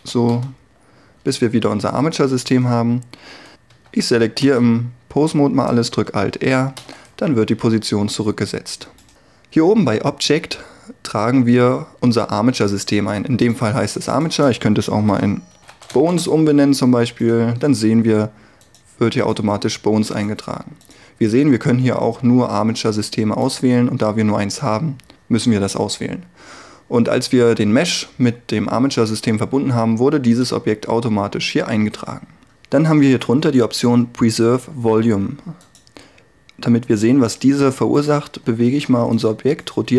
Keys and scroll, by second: 3.8 a, 6.9 alt+r, 15.1 shift+b, 15.6 n, 15.7 e, 16.0 s, 16.1 Return, 38.5 r.